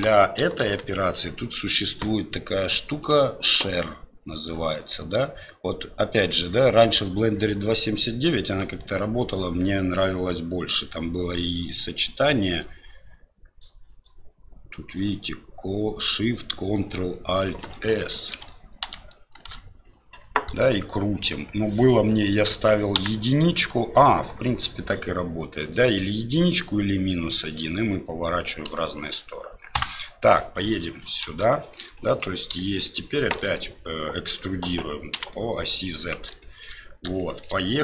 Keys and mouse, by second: 0.6 shift+z, 3.1 click, 19.2 ctrl+alt+shift+s, 30.5 right click, 31.5 shift+middle click, 31.9 click, 32.6 shift+middle click, 33.3 e, 36.4 shift+middle click, 37.1 shift+middle click.